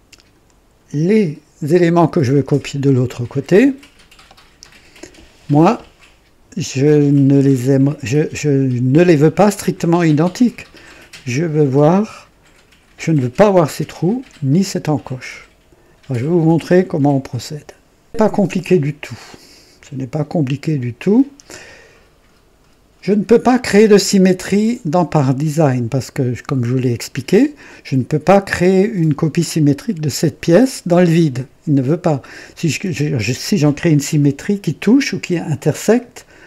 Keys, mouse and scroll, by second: 3.5-4.4 right drag, 18.0 click.